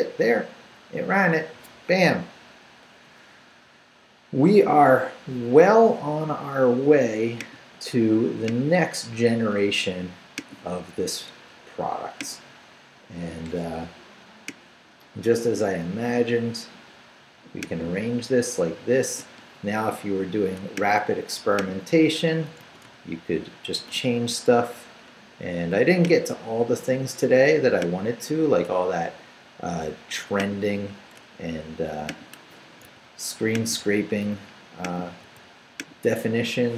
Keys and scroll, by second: 22.6 shift+/, 22.8 shift+Return, 23.7 Return, 23.8 Up, 31.1 BackSpace, 32.8 super+c, 34.3 super+v.